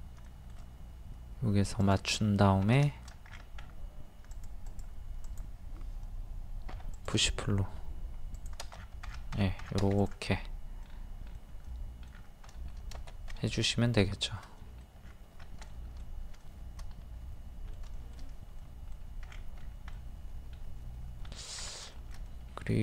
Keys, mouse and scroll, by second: 0.2 shift+middle click, 1.8 click, 2.2-2.6 scroll up 1, 2.8-3.1 shift+scroll, 3.1 scroll down 1, 4.3 scroll up 1, 4.3 click, 6.7 p, 7.0 click, 8.8 scroll down 1, 10.0 click, 10.8 middle click, 12.1 scroll down 1, 12.9 middle click, 14.1 shift+middle click, 15.0 scroll down 1, 16.6-17.9 shift+middle drag, 19.2-19.6 scroll up 1, 19.9 middle click, 21.3 scroll down 1, 21.9 shift+middle click, 22.1 scroll, 22.7 scroll down 1.